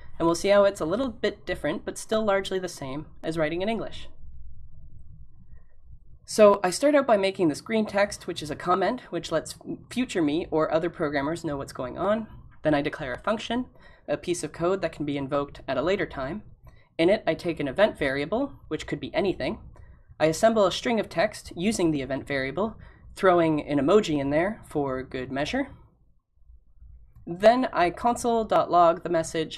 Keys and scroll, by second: 4.0 typing, 20.9-22.7 typing.